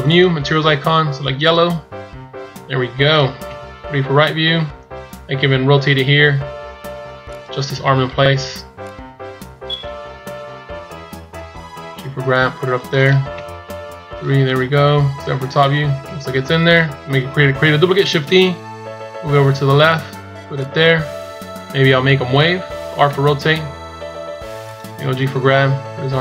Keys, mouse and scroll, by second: 3.3 KP_3, 5.9 r, 8.7 click, 10.1 KP_1, 11.7 g, 13.2 KP_3, 14.4 KP_1, 15.0 KP_7, 15.9 KP_1, 18.2 shift+d, 21.9 scroll down 2, 23.0 r, 24.9 g.